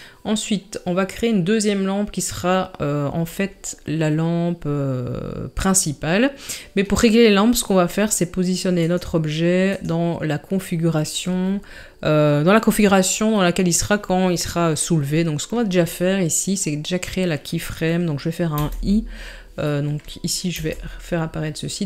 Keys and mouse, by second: 18.7 i, 20.6 n.